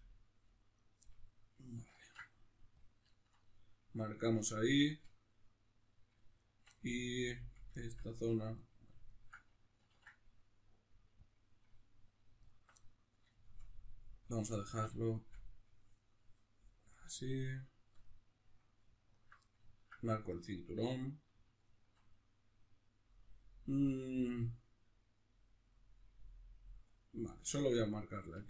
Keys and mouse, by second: 0.0 g, 0.8 right click, 1.0-6.4 middle drag, 2.0 ctrl+e, 6.4 alt+right click, 6.8-8.6 middle drag, 8.6-9.8 right drag, 9.8 ctrl+e, 11.6 middle click, 12.4 alt+right click, 12.8-19.1 middle drag, 19.1 alt+right click, 19.4-21.6 ctrl+middle drag, 21.6 alt+shift+right click, 22.1-27.3 middle drag, 27.3 alt+right click, 27.8 middle click.